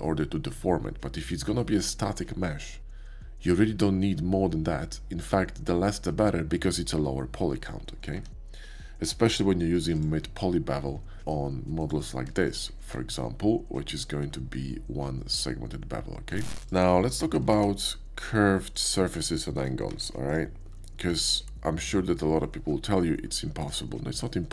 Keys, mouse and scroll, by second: 8.2 Tab, 8.8-9.9 middle drag, 10.0-11.8 middle drag, 10.2 scroll up 1, 11.9-12.4 shift+middle drag, 12.4 shift+scroll up 1, 12.5 shift+middle click, 12.8 q, 13.8 click, 16.6 Tab, 16.6 x, 17.5 shift+a, 18.7 click, 19.4 shift+middle click, 19.8 Tab, 20.3 click, 21.1 ctrl+b, 23.6 click.